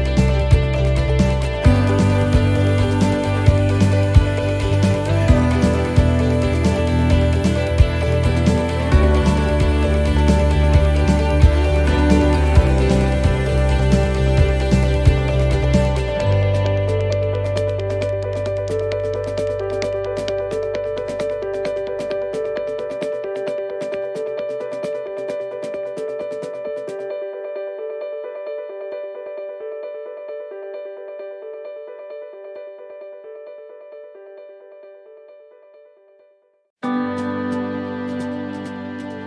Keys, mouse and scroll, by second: 0.3 click, 1.3 right click, 2.4 click, 4.0 right click, 4.6 shift+right click, 5.8 click, 7.7 right click, 8.2 shift+right click, 9.9 shift+right click, 11.5 alt+shift+right click, 11.8 alt+shift+right click, 12.9 click, 21.4 right click, 21.6 alt+shift+right click, 23.4 s, 27.3 right click, 28.5 d, 29.4 s, 33.7 middle click, 33.7 right click, 34.2 alt+shift+right click, 35.4 s, 38.0 middle click, 38.0 scroll down 2, 38.5 middle click, 39.0 scroll up 1.